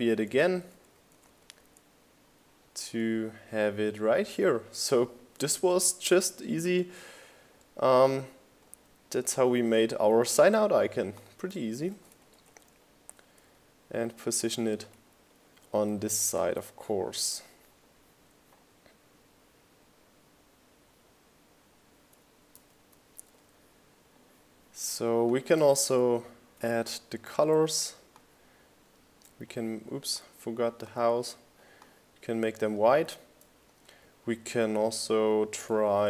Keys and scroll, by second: 5.5 Right, 7.1 Left, 8.3 Right, 9.5 Left, 9.7 Up, 15.9 super+s.